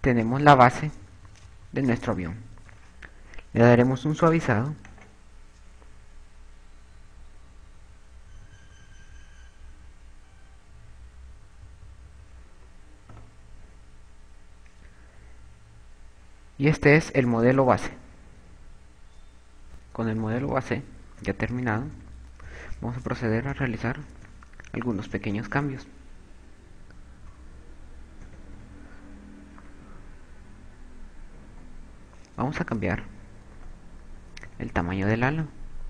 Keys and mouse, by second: 0.0-3.3 typing, 6.5 click, 8.7-13.5 typing, 14.9 a, 21.1-22.3 typing, 22.6 Tab, 23.3 KP_2, 24.1 KP_7, 25.2-27.1 KP_6, 27.7 Tab, 27.7 KP_4, 28.2 q, 31.1 Tab, 31.9 a, 33.1 v, 33.5 z, 33.5 b.